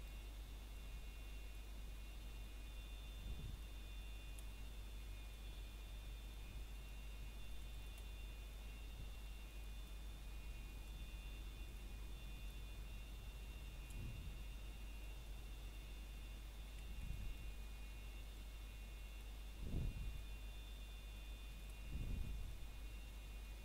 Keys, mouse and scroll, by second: 0.3 scroll down 1, 0.9 middle click, 1.4 scroll up 1, 1.7 shift+middle click, 2.0 scroll up 1, 3.4 click, 7.0 scroll down 1, 7.3 middle click, 7.7 scroll up 1, 10.6 click, 12.8 scroll down 1, 13.2 middle click, 13.9 scroll up 1, 14.8 click, 16.3 scroll down 1, 16.7 middle click, 17.4 scroll down 1, 17.6 middle click, 18.0-18.6 scroll up 3, 18.3 shift+middle click, 19.8 middle click, 20.1 scroll up 1, 20.8 alt+click.